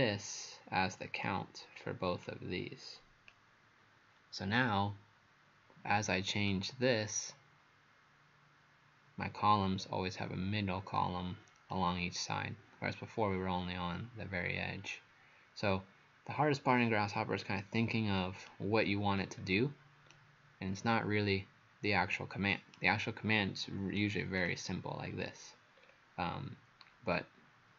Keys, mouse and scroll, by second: 11.7 right click, 19.1-20.1 scroll down 4, 20.1 right click, 24.4 click, 25.0 scroll up 3, 25.8-27.4 scroll down 3.